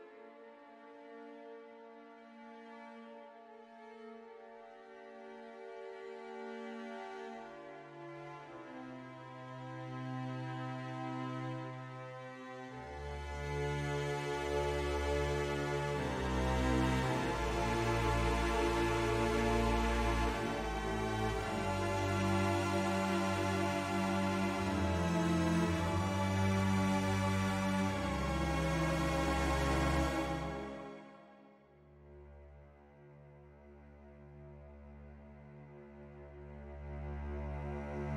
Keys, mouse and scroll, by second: 0.1 ctrl+r, 1.4 click, 2.1 middle click, 5.2 click, 6.8 middle click, 8.1 click, 11.9 shift+click, 12.4 middle click, 15.0 e, 15.6 z, 17.3 click, 17.7 ctrl+z, 18.1 middle click, 21.6 e, 22.4 z, 23.9 click, 24.6 ctrl+z, 25.4 e, 27.3 click, 27.9 middle click, 31.0 click, 31.7 shift+click, 35.3 click.